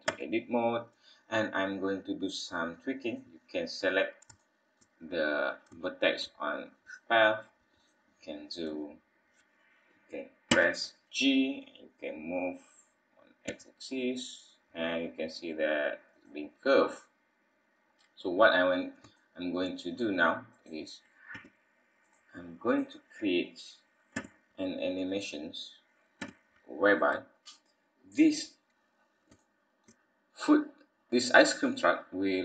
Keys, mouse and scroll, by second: 0.1 Tab, 0.6 scroll down 2, 1.0 scroll up 2, 1.6-2.4 scroll down 2, 3.1 click, 3.9 scroll up 2, 4.3 shift+middle click, 5.1-5.6 scroll up 3, 5.8 shift+middle click, 6.8 click, 7.1-7.5 scroll down 2, 7.8 click, 8.2-8.5 scroll down 2, 10.5 g, 16.4 scroll down 2, 17.7-18.1 scroll down 4, 18.5 scroll up 2, 19.1 shift+middle click, 20.5 click, 21.3 g, 22.6 click, 24.1 g, 28.0-29.0 scroll up 4, 29.0 scroll up 2, 29.5 shift+middle click, 32.0-32.4 scroll down 4.